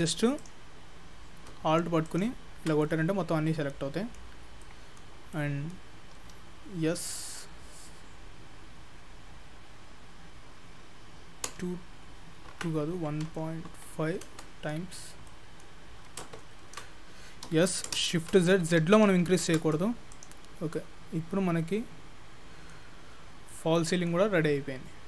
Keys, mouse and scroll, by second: 0.4 click, 0.6 shift+click, 2.1 alt+click, 2.3 alt+click, 2.9 middle click, 4.4 scroll down 1, 4.7 middle click, 5.2 scroll down 1, 5.4 middle click, 6.2 s, 14.9-16.4 scroll down 3, 15.3 middle click, 16.7 ctrl+z, 17.5 s, 20.1 click, 20.5 scroll up 2, 20.8 middle click, 23.5 middle click.